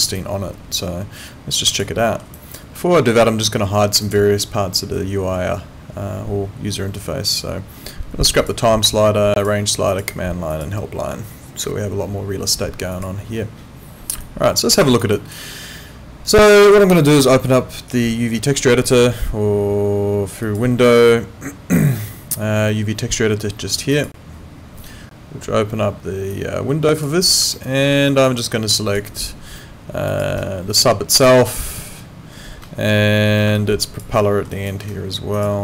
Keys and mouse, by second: 0.2 alt+click, 2.0 alt+middle click, 2.3 alt+click, 2.8 alt+middle click, 4.0 click, 7.3 click, 8.4 click, 12.9 click, 14.2 alt+click, 14.7 alt+middle click, 14.9 alt+right click, 15.1 alt+click, 20.4 click, 23.9 click, 26.3 click, 27.6 alt+middle click, 28.1 alt+right click, 28.4 alt+click, 29.1 alt+right click, 30.1 click, 33.6 alt+click, 34.2 alt+middle click, 34.5 alt+right click, 35.3 shift+click.